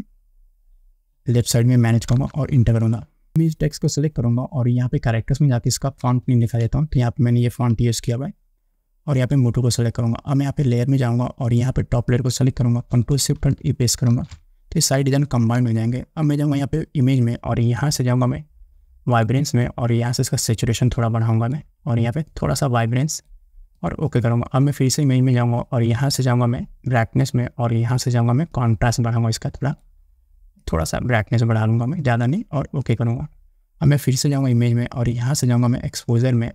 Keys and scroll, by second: 2.4 Return, 14.3 ctrl+alt+shift+e.